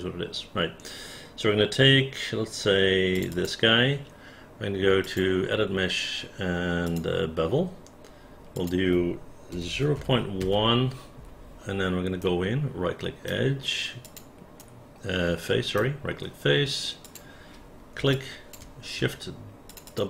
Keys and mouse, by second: 3.1 click, 3.3 click, 8.5 click, 9.5 KP_0, 9.7 KP_Decimal, 10.0 KP_1, 10.4 Return, 12.2-13.3 right drag, 14.1 click, 14.6-15.8 right drag, 17.1 click, 18.2 alt+click, 19.7 shift+click, 19.9 shift+click.